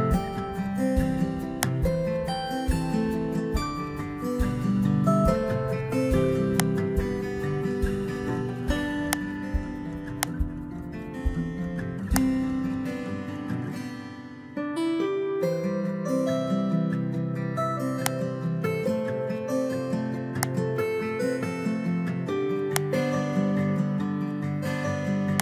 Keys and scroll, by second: 7.9 Delete.